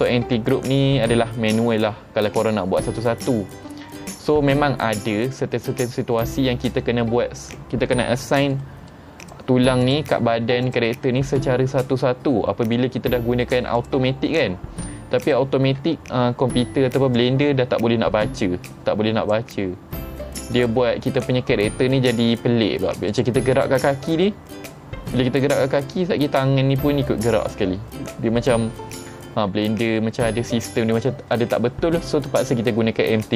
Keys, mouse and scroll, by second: 4.0 middle click, 8.6-9.0 middle drag, 9.3 click, 9.9 click, 10.7 click, 12.8-13.2 middle drag, 13.8 click, 15.3 click, 17.2-19.4 drag, 20.6 click, 23.2 click, 23.6 click, 29.7-30.5 middle drag.